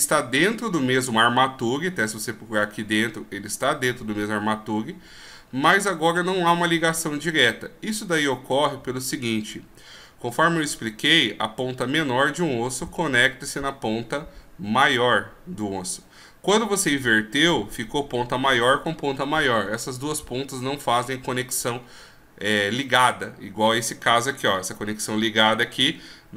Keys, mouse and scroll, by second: 23.7 right click, 24.4 g.